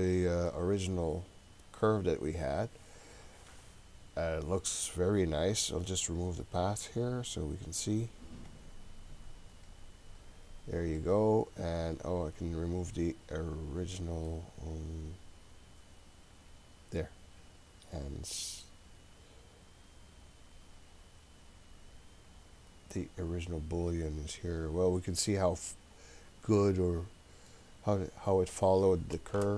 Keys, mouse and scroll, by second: 8.5 click, 9.6 click, 10.6 scroll up 1, 11.0-14.3 middle drag, 16.4 click, 23.9 click, 24.4 click, 25.3 click, 25.6 click, 26.4-27.5 middle drag, 27.5-28.5 scroll up 3, 29.2 scroll up 1, 29.4 shift+middle click.